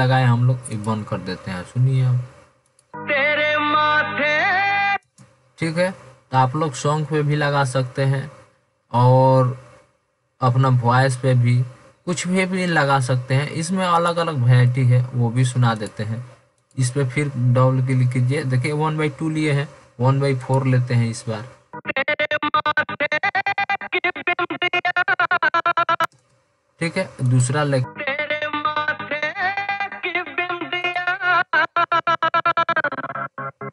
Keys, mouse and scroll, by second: 13.1 click, 14.4 click, 14.7-15.1 drag, 15.9 click.